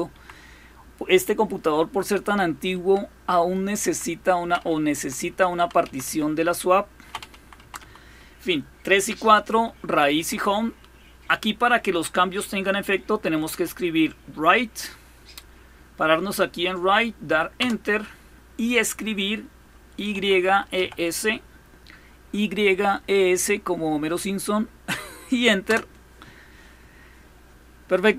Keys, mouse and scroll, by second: 2.5 typing, 3.6 typing, 4.7-5.9 typing, 7.1 Down, 7.4 Down, 9.3 Up, 9.9 Down, 12.9 Right, 13.1 Right, 13.3 Right, 17.4 Return, 19.6-21.1 typing, 25.5 Return.